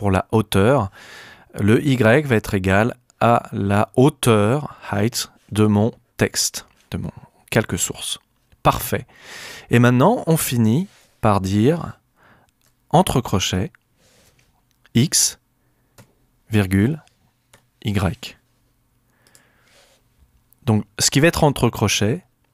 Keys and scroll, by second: 13.5 alt+shift+(, 14.9 alt+shift+x, 15.9 ,, 17.5 y.